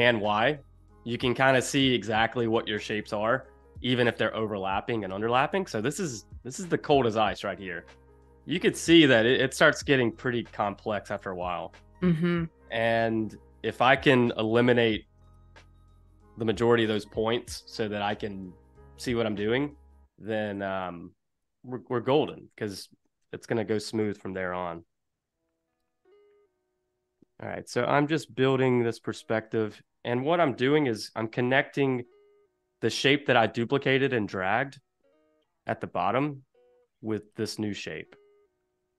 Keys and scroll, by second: 1.2 space, 3.3 super+-, 3.7 space, 5.0 space, 8.9 super+=, 9.8 space, 15.0 super+-, 15.6 space, 16.4 super+y, 16.8 space, 20.3 super+=, 20.8 space, 22.8 super+=, 23.1 space, 27.1 super+z, 30.8 super+=, 31.1 space, 35.4 v, 37.0 a, 38.5 super+z.